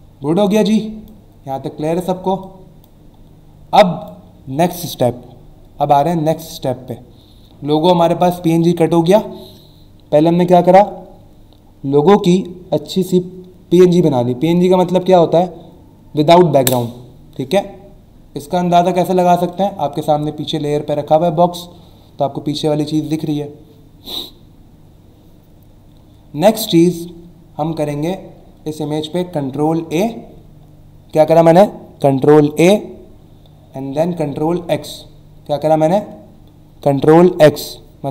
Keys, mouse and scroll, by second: 0.0 alt+scroll down 1, 0.8 click, 1.4 alt+scroll down 1, 2.4 click, 3.7 click, 19.5 click, 29.8 ctrl+a, 34.6 ctrl+x.